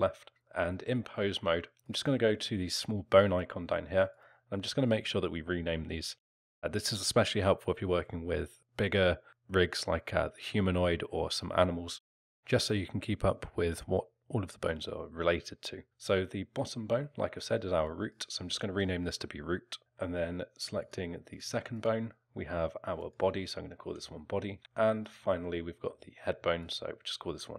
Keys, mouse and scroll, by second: 0.3 click, 1.7 click, 4.1 click, 17.9 click, 19.8 o, 20.8 click, 21.3 click, 21.7 click, 23.0 click, 25.0 click, 26.6 click.